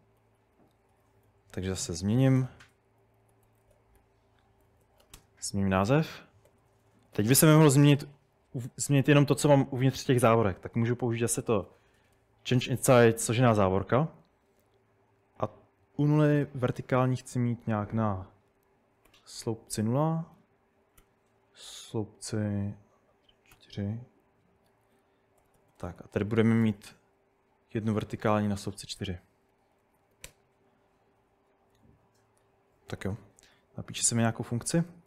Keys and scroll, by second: 0.2-7.3 typing, 11.5-13.0 typing, 19.1 typing, 20.3-21.0 typing, 24.7 Escape, 24.7-27.2 typing, 28.3 typing, 29.5 Escape, 29.7-34.0 typing.